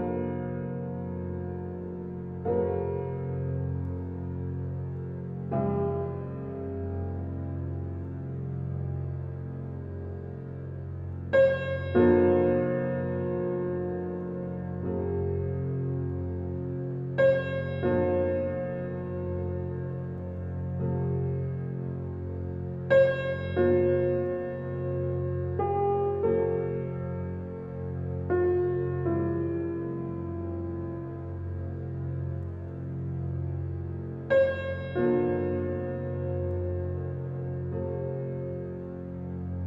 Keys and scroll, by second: 4.4 space, 9.4 space, 19.6 t, 20.0 i, 20.5 n, 20.6 y, 21.7 Return, 25.3-26.1 typing, 29.5-30.6 typing, 33.7 l, 33.9 a, 34.2 c.